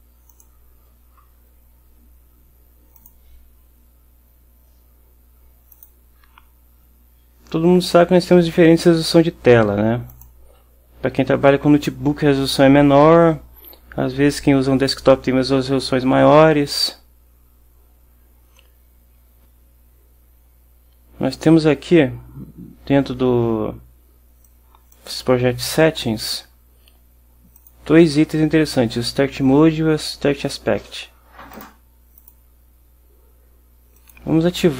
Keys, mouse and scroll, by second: 0.4 click, 3.1 click, 5.8 click, 10.2 click, 24.5-25.2 drag, 27.7 click, 31.6 click, 32.3 click, 34.1 click.